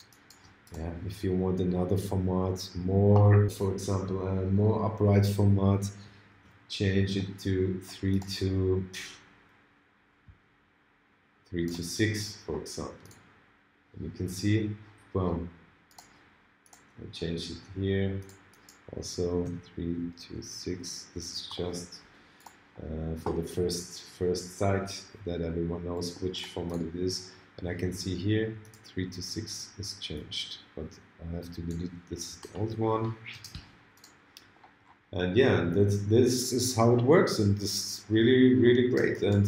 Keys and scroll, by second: 6.3 ctrl+alt+super+a.